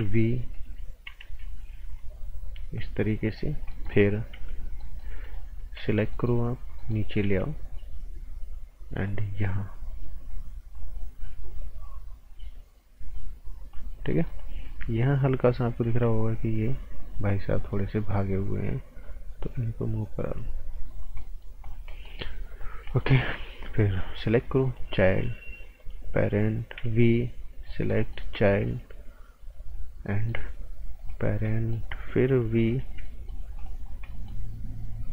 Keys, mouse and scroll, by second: 0.5 click, 1.2 a, 2.0 click, 3.5 scroll down 1, 3.7 right click, 4.3 b, 4.5 scroll down 1, 4.8 right click, 5.2 click, 5.6 scroll up 1, 5.8 right click, 7.2 a, 7.5 scroll up 1, 9.0 click, 13.9 scroll down 1, 14.1 right click, 14.4 scroll up 1, 15.8 t, 17.6 click, 20.9 scroll down 1, 21.2 right click, 21.6 scroll down 1, 21.9 right click, 22.3-22.6 scroll down 1, 22.9 right click, 23.1 scroll up 1, 23.8 click, 24.9 p, 25.8 click, 26.7 b, 27.5 click, 27.9 right click, 28.3 p, 29.6 scroll up 1, 30.1 right click, 31.0 click, 31.2 scroll down 1, 31.4 right click, 32.7 b, 33.0 right click, 33.5 click, 33.8 scroll down 1, 34.1 right click, 34.8-35.1 scroll up 1.